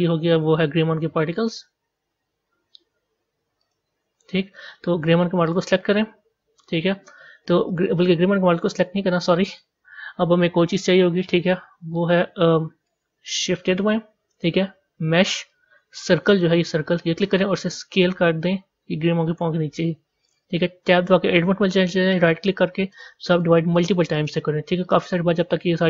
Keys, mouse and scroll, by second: 3.6-5.5 drag, 7.6-10.8 drag, 11.4-12.4 middle drag, 12.4 z, 16.4 shift+a, 17.9 s, 21.2 b, 22.9-25.8 right drag.